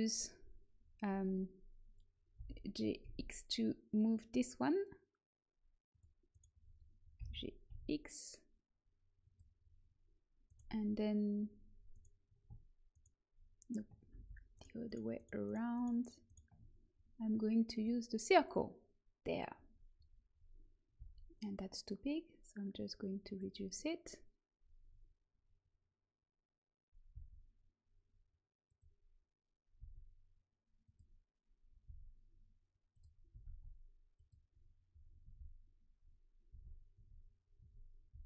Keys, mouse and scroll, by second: 2.3 g, 6.2 right click, 6.8-9.1 drag, 7.1 g, 10.4 click, 10.5-17.9 right drag, 14.1 ctrl+z, 17.6 click, 20.9 s, 27.0 s, 29.7 s, 31.8 s, 33.2 g, 35.2 a, 36.4 a, 36.9 Tab, 37.5 Tab, 38.0 z.